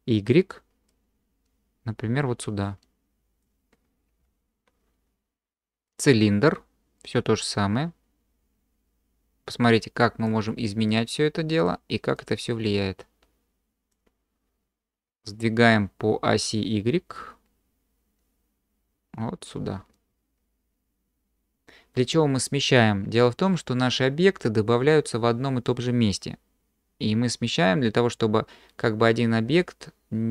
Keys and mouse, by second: 0.9-3.4 drag, 4.2 q, 7.0-10.3 drag, 10.9-11.7 drag, 12.2-13.9 drag, 17.3-19.5 drag.